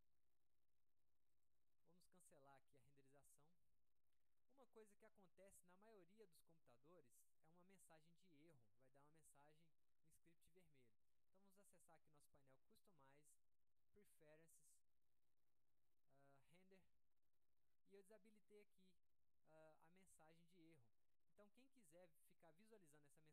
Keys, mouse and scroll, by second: 7.4-7.8 drag, 12.3 click, 14.4 click, 16.5 click, 22.4-22.8 drag.